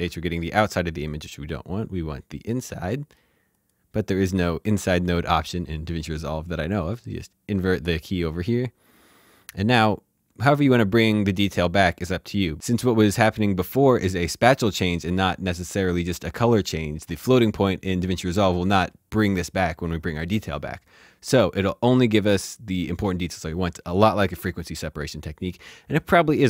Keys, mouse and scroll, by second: 2.4 click, 4.6 shift+h.